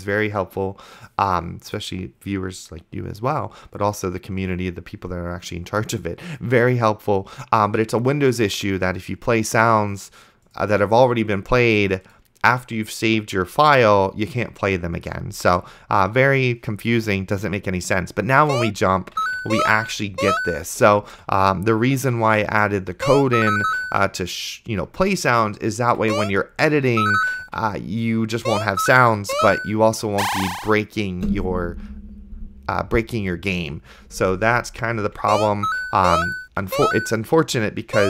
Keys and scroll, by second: 18.7-20.8 typing, 22.2 d, 23.2 space, 23.9 a, 25.8 d, 26.3 space, 27.4-30.1 typing, 35.5 space, 35.5 a, 37.3-38.0 typing.